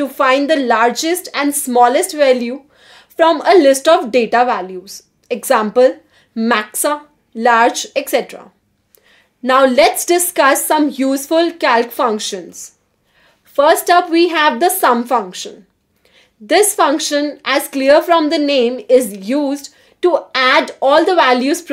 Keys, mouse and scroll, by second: 1.1 click, 1.3 Escape, 1.5 click, 5.2 click, 10.6-11.5 typing, 13.1-14.0 typing, 17.4-19.6 typing, 18.8 Return, 19.8 Return.